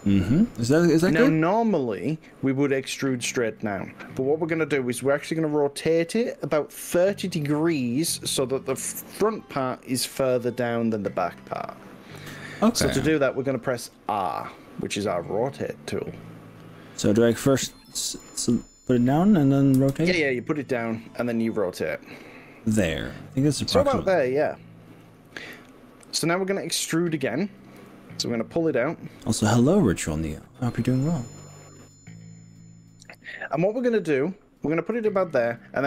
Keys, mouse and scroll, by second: 18.1 click, 19.9 r, 25.1 click, 27.9 e.